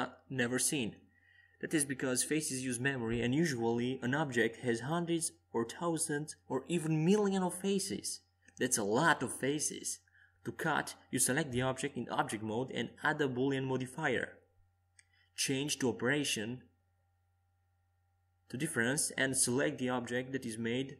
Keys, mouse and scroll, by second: 0.8 a, 2.4 c, 10.1 x, 14.9 z, 15.7 KP_5, 17.4-19.2 middle drag, 20.4 Tab.